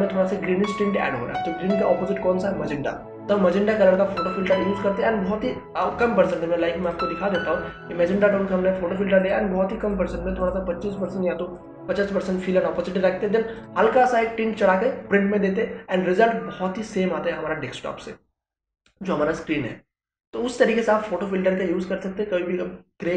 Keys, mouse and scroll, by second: 6.3 click.